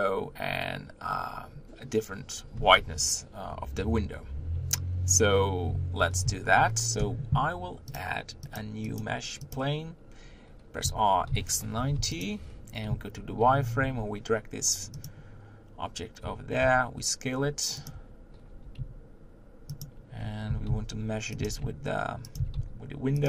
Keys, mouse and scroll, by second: 6.6 z, 9.5-10.8 drag, 10.8 r, 16.2 Tab, 17.9 Tab, 20.2 Tab.